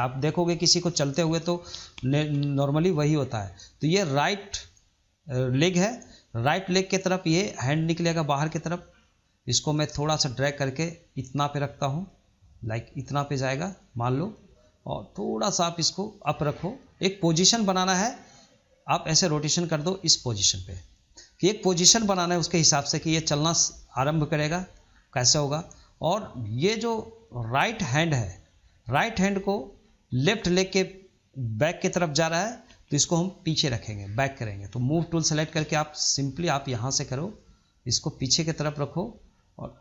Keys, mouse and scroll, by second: 2.8-5.8 middle drag, 5.9-8.3 middle drag, 8.3 click, 8.9-10.1 middle drag, 10.1 click, 15.1 click, 17.4-18.4 drag, 20.3-20.6 scroll down 2, 20.6-23.8 middle drag, 24.8-25.1 scroll up 1, 25.1-27.5 shift+middle drag, 27.5 click, 28.3-33.0 middle drag, 34.5 click, 34.9-36.5 middle drag, 36.5-39.5 drag, 39.7 click.